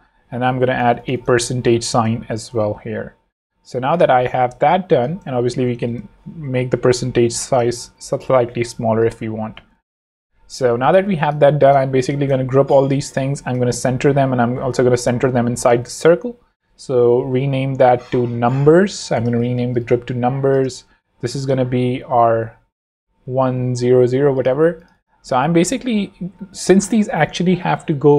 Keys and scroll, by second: 1.5 alt+shift+5, 2.0 shift+5, 2.2 shift+Escape, 2.4 v, 6.0 shift+super+,, 7.9 shift+super+v, 8.4 v, 9.9 shift+super+., 10.7 shift+super+v, 11.2 shift+v, 12.4 shift+super+g, 12.9 ctrl+shift+super+g, 13.1 ctrl+super+c, 13.7 ctrl+shift+super+c, 15.4 alt+shift+z, 16.1 alt+v, 16.7 super+v, 17.0 shift+super+r, 17.8-19.6 typing, 20.7 v, 22.6 super+r, 23.3 Escape, 24.1 super+Escape, 26.7 Right.